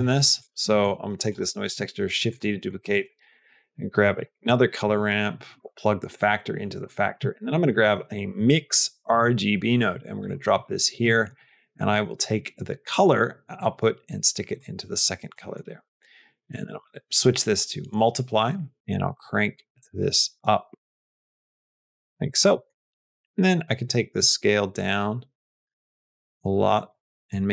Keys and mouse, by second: 0.3 click, 0.5 middle click, 1.1 click, 1.5 shift+d, 2.5 middle click, 2.8 shift+a, 6.0 click, 6.9 click, 7.2 shift+a, 10.9-12.7 middle drag, 13.4-14.5 drag, 15.2 middle click, 16.4-22.0 drag, 22.4 middle click, 22.8 middle click, 24.1-26.8 drag.